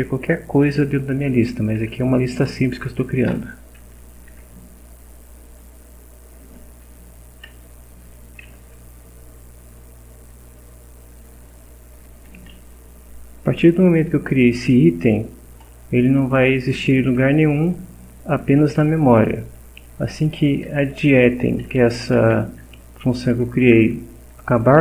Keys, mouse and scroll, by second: 1.7 End, 4.1 Down, 6.7 Down, 8.4 Home, 12.1 Up, 12.9 End, 18.9 Up, 19.9 Left, 21.1 Up, 21.4 Left, 21.7 Up, 22.2 Down, 23.1 Left, 24.6 Down.